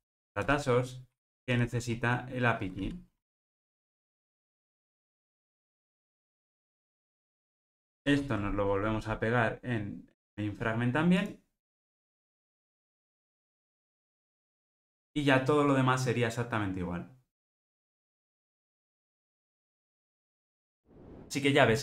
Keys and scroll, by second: 0.5 Return, 1.1 Delete, 6.2 alt+super+l, 6.3 alt+super+l, 13.1 super+v, 14.8 ctrl+r.